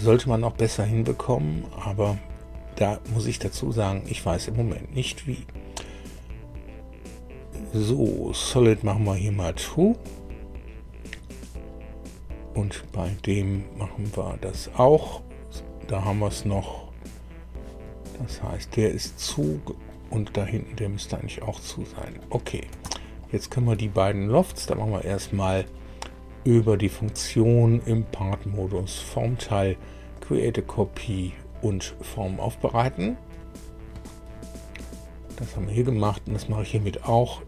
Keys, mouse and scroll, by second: 1.8 click, 3.8 click, 6.1-7.5 drag, 8.4 click, 9.1 click, 10.0 click, 13.4 click, 18.1-20.0 middle drag, 20.3-22.3 middle drag, 22.7 shift+middle click, 23.2 shift+middle click, 24.7 click, 28.7 click, 30.1 click, 32.9 click, 35.2 click, 36.3 click.